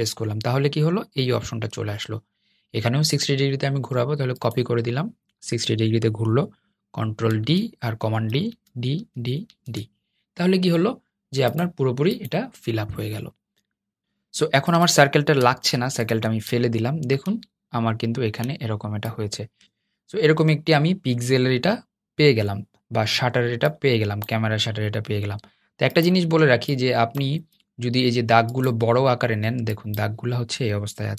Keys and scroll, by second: 7.1 super+d, 8.2 super+d, 8.7 super+d, 9.2 super+d, 30.9 super+z.